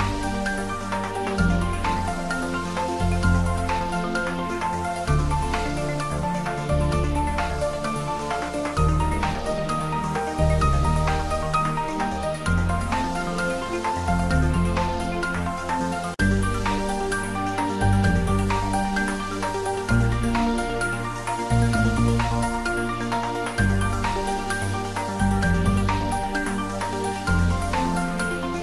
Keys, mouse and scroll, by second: 2.6 click, 3.0-3.3 scroll down 1, 4.2 Tab, 4.5-5.1 scroll down 1, 5.1 Tab, 5.3 click, 7.7-8.1 scroll up 1, 8.5 middle click, 8.7 scroll up 1, 9.2-14.3 drag, 14.3 Tab, 15.1-16.7 scroll down 1, 17.7 click, 21.8 click, 24.9 click, 26.2 click, 26.8-27.4 scroll down 1, 27.9 ctrl+s.